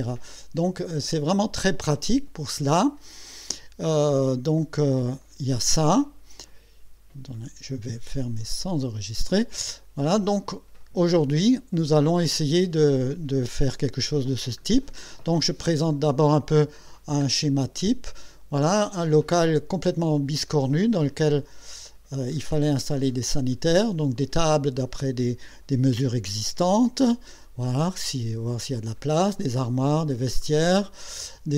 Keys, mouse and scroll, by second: 1.9 click, 4.6 right click, 5.2 click, 8.5 click, 11.5 click, 13.8-14.3 scroll up 1, 14.7-15.5 scroll down 4, 15.6 scroll up 2, 16.4 scroll down 2, 16.9-17.6 scroll up 2, 17.6-17.9 scroll down 2, 18.8-19.1 scroll down 2, 22.4-23.6 middle drag, 23.9 scroll up 2, 26.7-27.0 scroll up 2, 28.7 scroll down 2, 29.4-29.8 scroll up 2, 30.0 scroll down 2, 30.4 middle click.